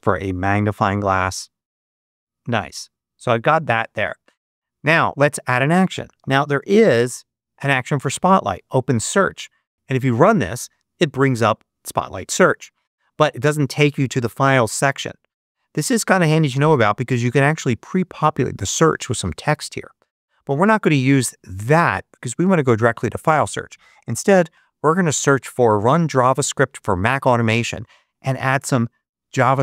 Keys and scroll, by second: 0.0-0.2 typing, 5.7-6.9 typing, 23.7-24.7 typing.